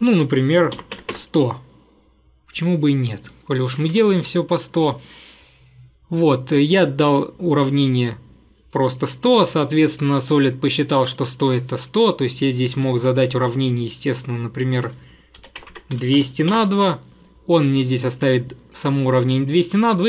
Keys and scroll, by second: 0.5-1.5 typing, 4.2 Return, 15.2-16.7 typing.